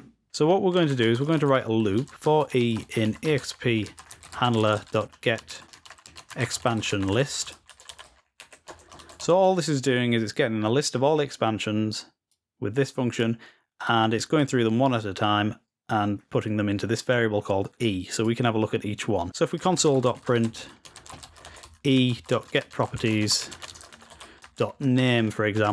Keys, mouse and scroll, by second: 13.0 click, 14.2-15.5 drag, 17.9 click, 18.8 click.